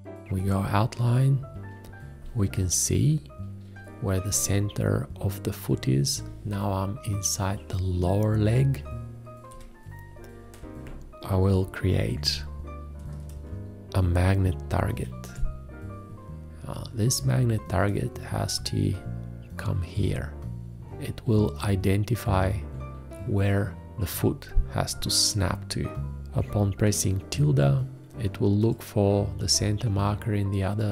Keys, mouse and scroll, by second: 9.5 7, 14.9 shift+`.